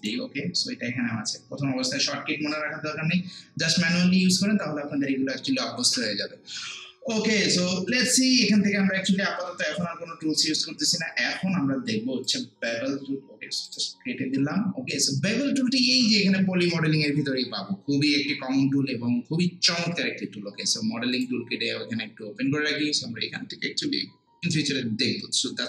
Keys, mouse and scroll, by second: 12.2 click, 21.1 click.